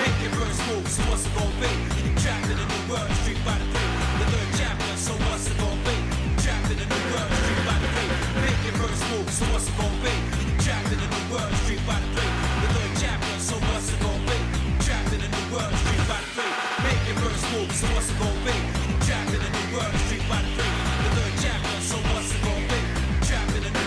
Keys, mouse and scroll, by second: 0.6 Tab, 0.9-2.0 shift+middle drag, 2.5 scroll down 1, 2.5 scroll up 1, 3.0 click, 3.4 shift+middle click, 4.6-6.0 shift+middle drag, 6.1 Tab, 6.8-7.9 shift+middle drag, 8.1 middle click, 8.8 shift+middle click, 9.4 shift+scroll up 1, 10.0 scroll down 1, 10.6 shift+middle click, 11.6 KP_Divide, 12.7 shift+middle click, 13.1 shift+middle click, 13.8 Tab, 14.1-14.8 scroll down 3, 14.9 shift+middle click, 15.7 middle click, 16.2 shift+middle click, 17.2 click, 19.7 shift+middle click, 20.6 middle click, 21.2 click, 22.4 click, 23.6 click.